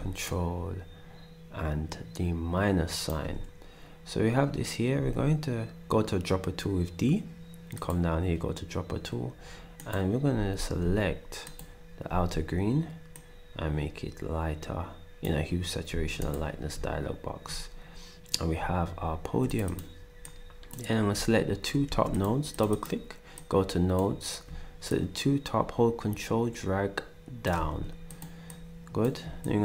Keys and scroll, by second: 5.0 d, 10.3 d, 10.8 d, 12.1 d, 15.9 s, 21.9 ctrl+s, 27.5 s.